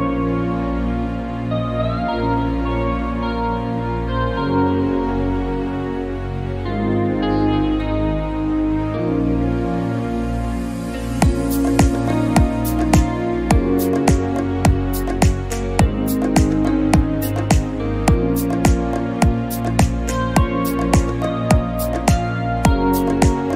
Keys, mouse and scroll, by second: 0.0 click, 1.6 click, 2.1 click, 2.7 KP_0, 5.3-6.7 drag, 8.6-9.3 scroll down 4, 9.2-11.9 drag, 10.4-10.8 scroll down 2, 11.3-11.9 scroll down 1, 16.7 scroll down 4, 17.0 click.